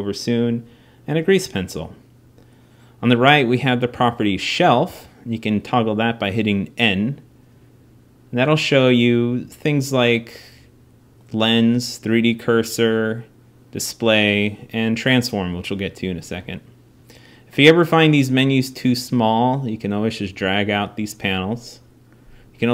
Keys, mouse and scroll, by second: 3.7 n, 4.6 n, 6.9-8.7 drag, 16.8-18.6 drag, 19.2-21.2 middle drag.